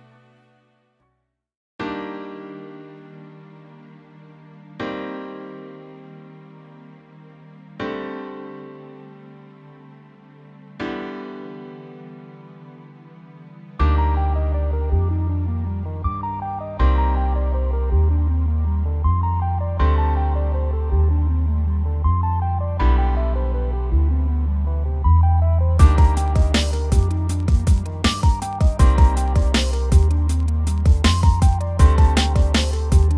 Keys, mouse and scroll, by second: 0.5 alt+click, 0.8 middle click, 1.0 scroll up 1, 1.2 middle click, 1.7 click, 2.2 scroll down 1, 2.4 r, 3.0 click, 3.4-6.2 middle drag, 6.2 click, 6.6 scroll down 2, 6.7 shift+middle click, 7.4 alt+click, 7.7 scroll up 1, 7.9-8.9 middle drag, 8.9 r, 9.2 r, 9.4 click, 9.9 middle click, 10.6 scroll down 2, 10.9 scroll up 2, 11.3 alt+click, 11.7 shift+middle click, 12.6 click, 13.2 middle click, 13.4 alt+click, 13.8 click, 14.2 scroll down 1, 14.3-15.9 middle drag, 15.9 scroll up 1, 16.3 alt+click, 16.5 middle click, 16.9-17.4 scroll up 2, 17.2 middle click, 17.4 scroll down 1, 17.7-19.3 shift+middle drag, 19.3-19.8 scroll up 2, 19.8 click, 20.2-20.7 middle drag, 20.7 r, 21.1-22.2 middle drag, 22.2 click, 22.5 middle drag, 22.8 r, 23.5 middle click, 23.9 middle drag, 24.2 r, 24.7 alt+click, 25.6 middle click, 25.8 scroll up 1, 26.0-26.5 shift+middle drag, 26.9 click, 27.3 scroll down 2, 27.6 scroll up 1, 28.2 alt+click, 29.2 KP_Decimal, 29.6-32.2 scroll down 6.